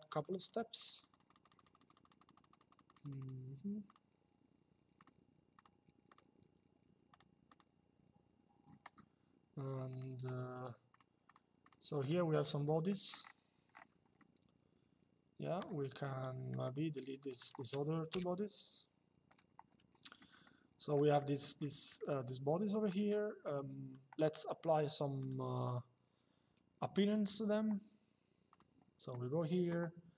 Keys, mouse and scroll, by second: 4.7 click, 9.6 click, 12.5 middle click, 16.3 click, 17.8 Delete, 19.0 click, 20.1 shift+middle click, 20.9 middle click, 21.7 shift+middle click, 24.9 click, 28.2 click.